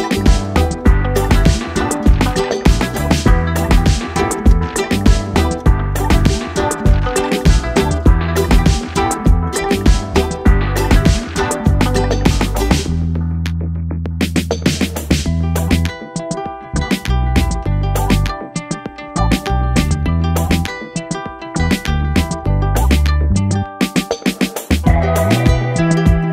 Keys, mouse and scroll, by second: 1.1 click, 6.5 click, 9.7 ctrl+space, 10.0-10.6 click, 10.2 space, 12.8 click, 24.3 Down.